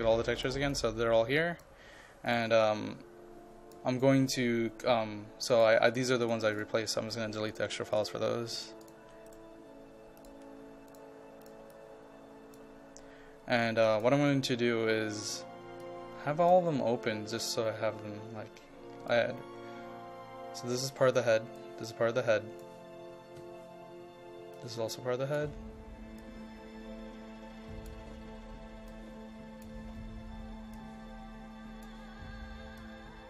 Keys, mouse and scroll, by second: 8.0 ctrl+click, 8.8 ctrl+click, 9.3 right click, 10.2-15.7 drag, 19.8-33.2 drag.